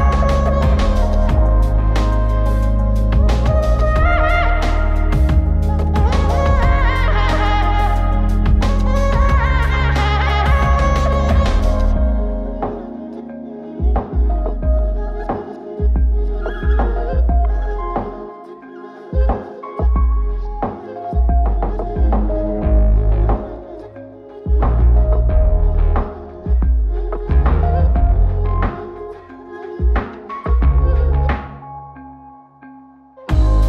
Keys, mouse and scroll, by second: 0.6 click, 1.1 click, 2.5 click, 3.1 drag, 4.3-5.0 scroll down 2, 5.0 click, 5.0 scroll down 1, 5.6 click, 5.8 middle drag, 6.6-8.0 drag, 8.7 click, 10.2 x, 13.8 ctrl+z, 20.9 x, 22.2 typing, 31.6 click.